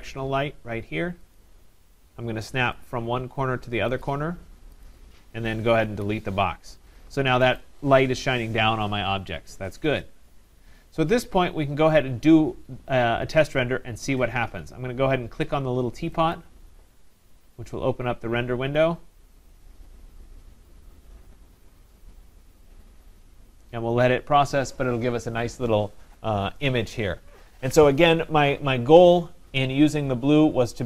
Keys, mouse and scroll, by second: 1.4 click, 2.9 click, 4.0 click, 4.9 click, 6.0 Delete, 7.6 click, 16.4 click, 18.0-21.4 drag.